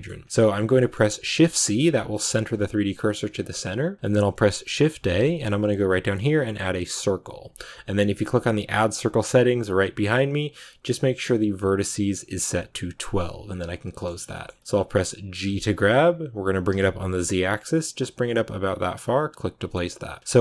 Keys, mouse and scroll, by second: 0.5 scroll down 2, 0.7 middle click, 1.5 click, 1.8 scroll down 2, 2.3 shift+c, 14.0 scroll down 2, 14.2-15.4 shift+middle drag, 15.4 g, 20.2-20.4 scroll up 4.